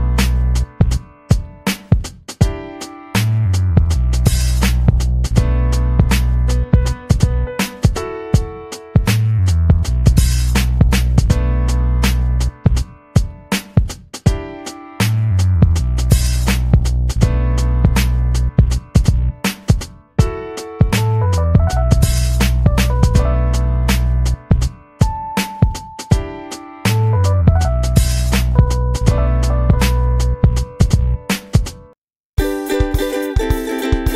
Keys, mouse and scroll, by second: 0.2-2.6 typing, 4.4 click, 6.5 click, 8.6 click, 11.1 click, 12.7 click, 13.0 scroll up 1, 15.3 click, 16.5 ctrl+d, 17.1 click, 24.1 click, 25.0 click, 25.5 click, 29.6-30.9 ctrl+scroll down 12, 31.4 ctrl+z, 33.3 ctrl+y, 33.9 ctrl+y.